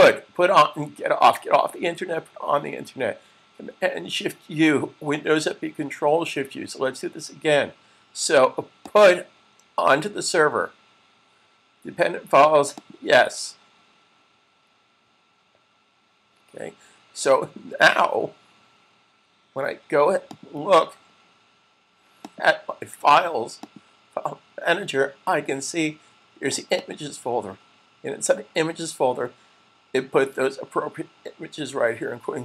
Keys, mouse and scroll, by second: 8.7 click, 12.9 click, 20.4 click, 26.5 click.